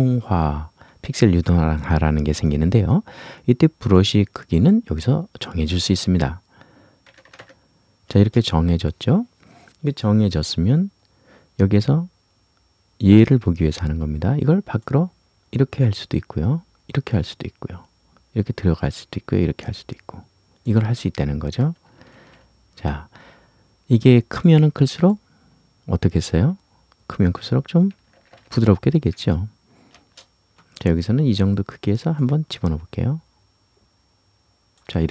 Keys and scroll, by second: 8.1 Return, 22.1 ctrl+z, 29.9 Return.